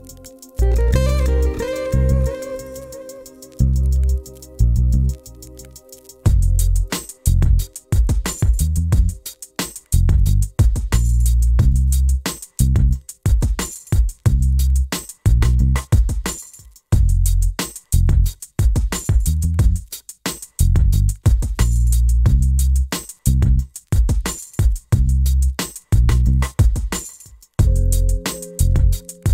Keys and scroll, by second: 1.4 c, 2.9 t.